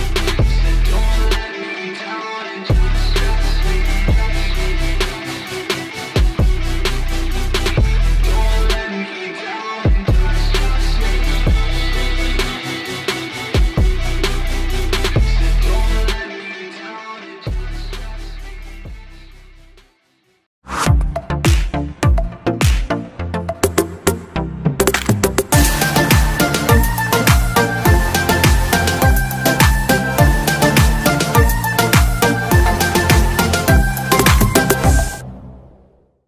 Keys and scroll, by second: 5.3 Right, 12.5 Left.